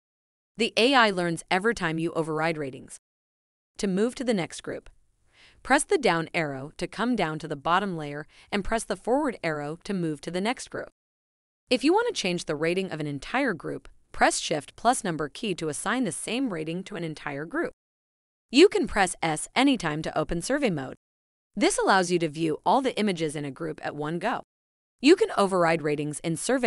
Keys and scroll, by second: 2.0 4, 5.2 Down, 7.1 Right, 10.0 Up, 12.5 Down, 14.2 shift+1, 19.2 Up, 19.7 shift+s.